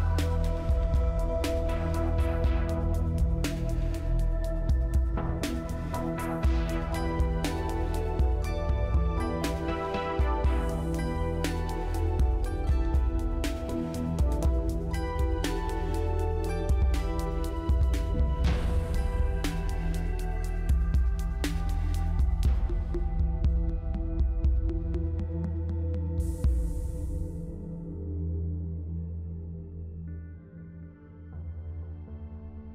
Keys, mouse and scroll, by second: 5.6-6.5 scroll up 4, 6.5-8.4 scroll down 4, 8.5-9.2 scroll up 2, 9.7 scroll up 1, 9.8-10.2 scroll down 2, 12.1 scroll down 1, 12.1 double click, 12.9 5, 13.6 m, 13.9 Return, 16.2-17.2 scroll up 2, 18.1 scroll up 1, 18.2-20.1 scroll down 3, 20.1 2, 20.8 m, 25.4-26.5 scroll up 4, 26.5 middle click, 27.5-28.1 scroll up 3, 28.1-29.1 scroll down 4, 29.3-30.9 scroll up 3, 30.9-32.1 scroll down 3, 32.1-32.7 scroll up 2.